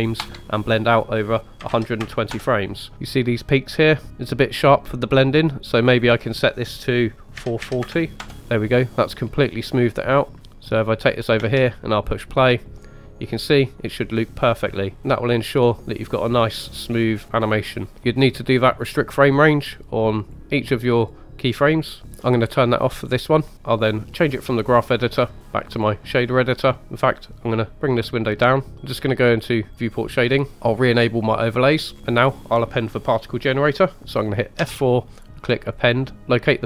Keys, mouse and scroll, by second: 5.5-8.4 drag, 7.7 KP_4, 10.3 click, 10.3 space, 10.9 click, 11.4 space, 17.9-18.7 scroll down 2, 20.2 click, 21.0-21.6 drag, 22.0-23.5 drag, 24.2-26.8 drag, 27.2 click, 30.5 middle click, 30.5 scroll down 2, 31.2-31.7 drag, 34.6 F4.